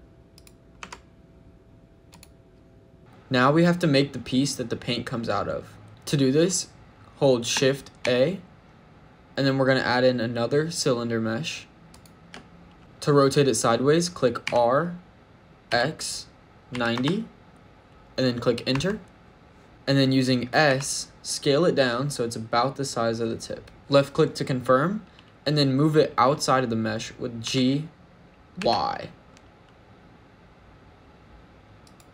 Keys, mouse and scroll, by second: 0.2 click, 0.6 Tab, 1.9 click, 5.9 shift+middle click, 5.9-7.4 scroll down 1, 7.9 shift+a, 11.9 shift+a, 14.3 r, 15.5 x, 16.6 KP_9, 16.8 KP_0, 18.6 Return, 20.5 s, 23.8 click, 27.3 g, 28.4 y, 31.7 click.